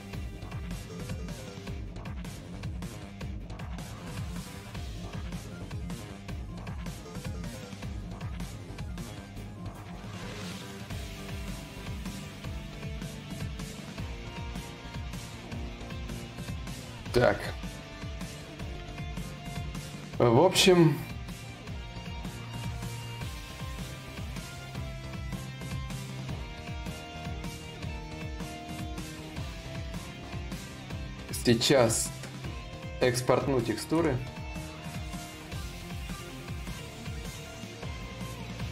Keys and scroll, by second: 16.6 ctrl+s.